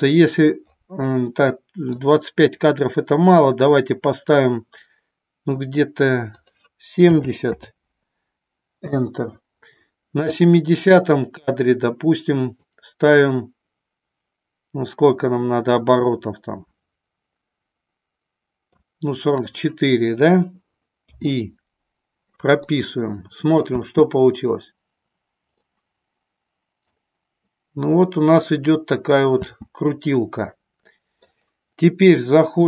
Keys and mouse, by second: 1.6 middle click, 6.4-9.2 drag, 10.4 click, 12.8-18.8 drag, 21.2 i, 22.8-23.7 middle drag, 23.8 space, 25.7-27.1 middle drag, 29.5 space, 30.3-31.3 middle drag.